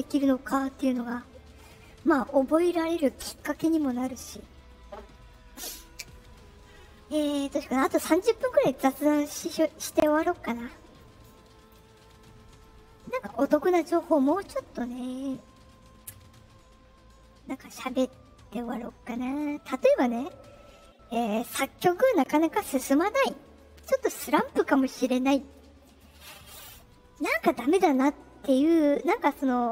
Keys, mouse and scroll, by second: 19.3 click.